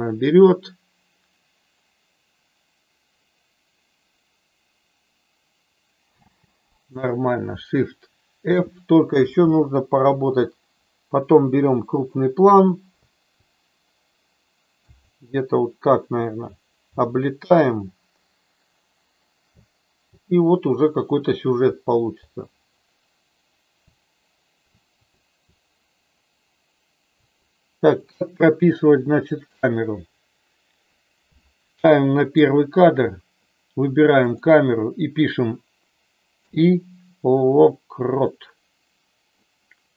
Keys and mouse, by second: 6.4 space, 8.5 shift+f, 9.5-10.2 Up, 13.0 Down, 14.8 Right, 19.5 Left, 20.0 Left, 21.6 Up, 22.7 Down, 24.7 Up, 25.1 Up, 26.5 Down, 28.0 click, 32.2 click, 34.4 click, 36.2 i.